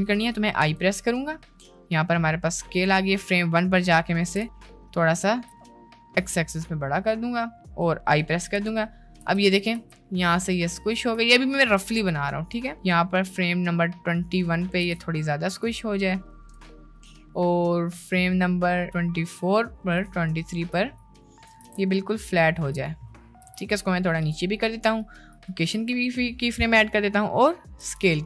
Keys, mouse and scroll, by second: 0.6 i, 1.8 click, 3.4 click, 4.3 s, 5.5 s, 8.5 i, 9.4 space, 9.8 space, 11.9-14.4 drag, 15.0 s, 16.5 i, 17.2-20.1 drag, 20.5 shift+middle click, 21.4 shift+middle drag, 21.8 s, 23.6 g, 25.0 click, 26.7 click, 27.8 i.